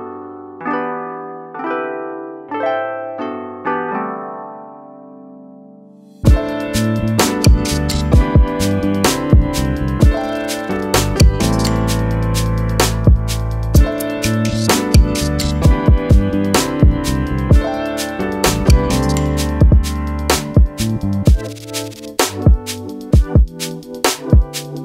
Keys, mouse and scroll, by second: 0.3 click, 2.7 click, 4.7 click, 6.3 alt+scroll up 2, 6.6 click, 10.5 click, 12.0 BackSpace, 12.4-12.9 alt+scroll down 2, 12.9 click, 14.5-14.9 alt+scroll up 2, 14.9 click, 16.0-16.4 scroll down 2, 17.3 scroll down 1, 17.6 alt+scroll up 2, 17.8 scroll down 1, 18.4 alt+scroll down 2, 18.7-19.1 scroll up 3, 19.2-20.2 scroll down 1, 21.0 click, 24.4 click.